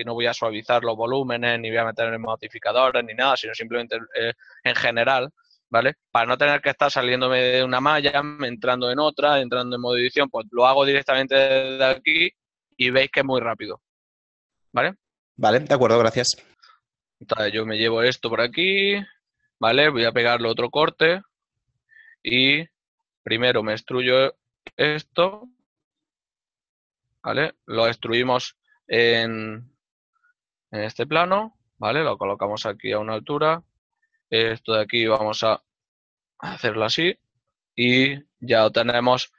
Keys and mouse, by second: 14.7 right click, 14.9 g, 19.2 shift+click, 22.5 click, 23.1 right click, 23.7 shift+right click, 27.9 e, 35.9 KP_0, 36.0 Return, 36.0 KP_Enter.